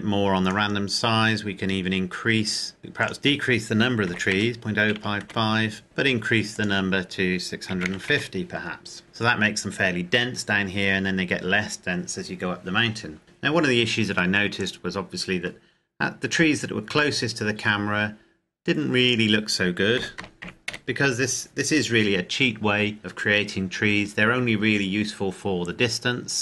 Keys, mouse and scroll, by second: 2.8-3.2 scroll up 1, 3.2 click, 4.3 KP_Decimal, 4.6 KP_0, 5.0 KP_5, 5.8 KP_Enter, 7.6 click, 8.2 KP_5, 8.7 KP_0, 9.0 KP_Enter, 14.8 click, 19.2 click, 20.2 KP_Decimal, 20.4 KP_0, 20.9 KP_6, 22.0 KP_Enter.